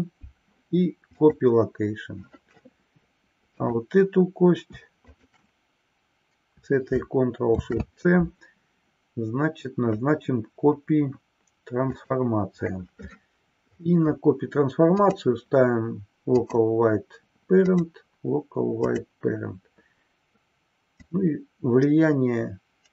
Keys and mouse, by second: 3.6 click, 5.0 shift+click, 7.5 ctrl+shift+c, 14.9-16.8 drag, 17.8-19.3 drag, 20.9-22.9 drag.